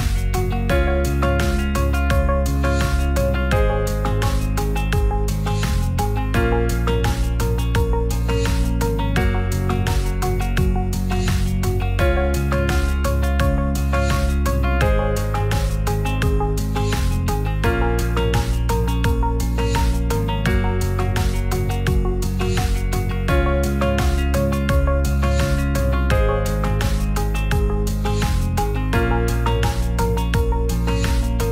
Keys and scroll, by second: 7.6 ctrl+c, 10.0 t, 11.6 ctrl+v, 20.2 t.